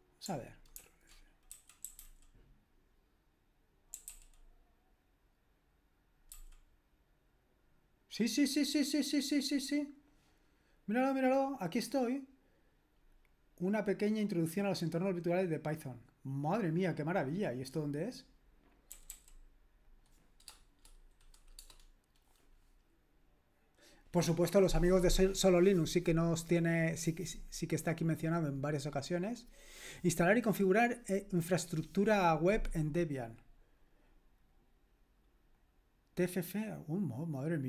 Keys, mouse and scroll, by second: 0.8 ctrl+f, 1.3-2.6 typing, 3.7-4.6 typing, 6.3 typing, 18.7-19.4 typing, 35.6-37.6 drag.